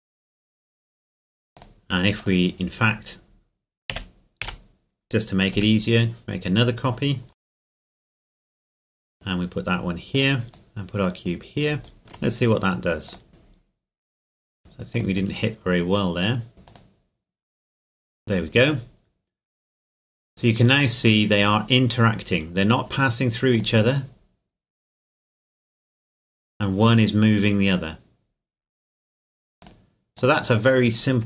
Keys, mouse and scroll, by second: 1.5 click, 3.9 z, 4.4 a, 5.5 b, 5.9 click, 7.4 shift+d, 7.5-8.7 shift+drag, 8.7 z, 8.8 g, 10.1 click, 10.5 right click, 12.0 shift+middle click, 13.1 click, 15.9-16.5 scroll down 1, 16.5 scroll up 1, 16.7 click, 23.5 click, 29.6 click.